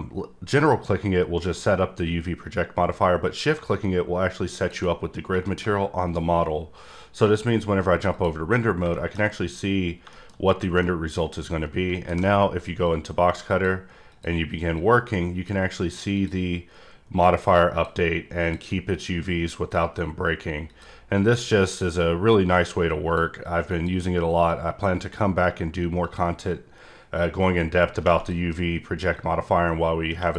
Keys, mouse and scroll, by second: 4.5 click, 5.2 scroll down 1, 5.4 middle click, 7.3 click, 8.1 click, 8.4-8.8 scroll up 3, 8.9 middle click, 9.8 scroll down 1, 10.1 middle click, 10.8 middle click, 12.8 click, 14.1 click, 14.7 click, 16.1 click, 17.1 click, 18.4 click, 19.0 click, 20.6 click, 21.6 click, 22.5 click, 23.7 click, 24.5 click, 26.0 click, 27.2 click, 29.1 click.